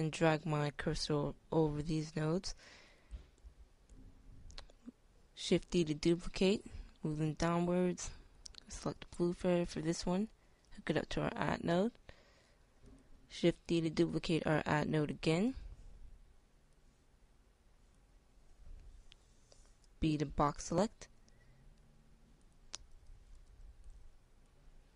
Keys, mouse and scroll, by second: 3.0 shift+d, 14.7 shift+d, 15.6 click, 19.5-20.6 drag, 20.6 b.